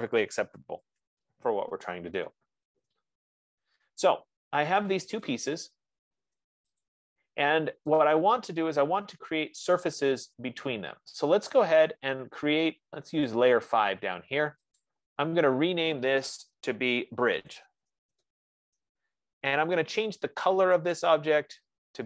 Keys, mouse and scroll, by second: 0.5-1.6 typing, 5.8 click, 7.2 click, 8.4 click, 15.1 click, 17.5-19.0 typing, 21.2 click.